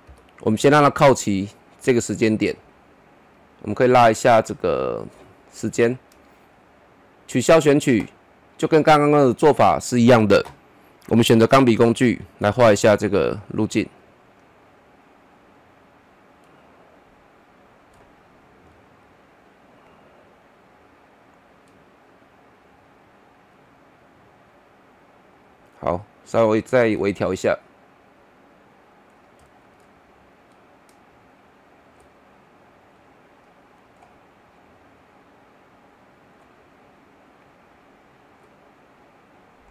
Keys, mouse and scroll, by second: 0.0 [, 4.1-7.2 drag, 8.4 scroll up 1, 8.8-11.1 middle drag, 11.1 click, 15.3 ctrl+z, 15.4-29.4 drag, 29.4 middle click, 30.5-39.7 drag.